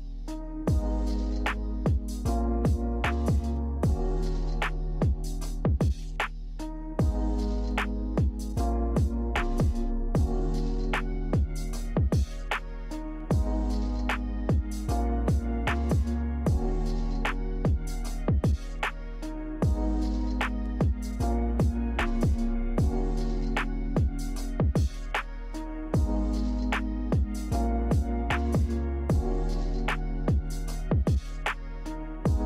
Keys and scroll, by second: 8.1 v, 20.3 Delete, 29.0 z.